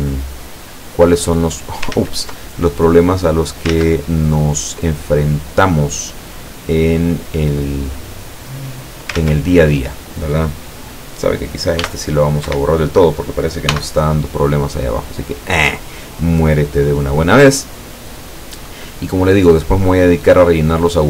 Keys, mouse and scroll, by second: 0.9 scroll up 2, 1.3 middle click, 2.0 ctrl+z, 3.1 click, 3.8 ctrl+z, 5.1-5.6 scroll up 2, 5.6 scroll down 2, 6.7 click, 7.4-7.8 scroll up 2, 8.1-8.5 scroll up 2, 9.2 ctrl+z, 11.9 e, 12.5 Escape, 13.7 x, 15.2 click, 16.3-18.2 middle drag, 18.2 scroll down 1, 18.7-19.7 middle drag, 20.7 click.